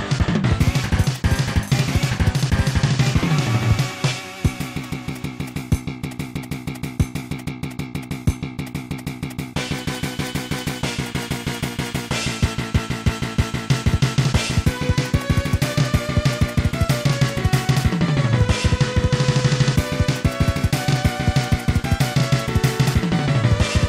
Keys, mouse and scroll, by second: 2.7 click, 5.1 click, 5.7 click, 6.3 s, 7.5 click, 7.8 ctrl+z, 8.3 click, 8.6 click, 8.9 s, 12.6 click, 14.2 x, 16.6 click, 17.9 scroll down 1, 19.4 0, 20.4 scroll down 1, 21.6 middle click.